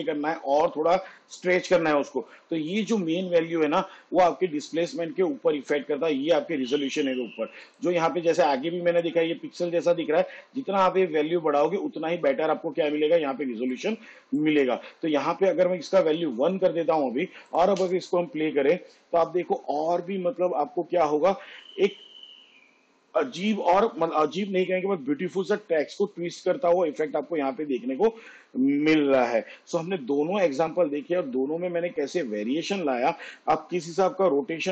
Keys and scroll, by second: 16.3 1, 18.0 space.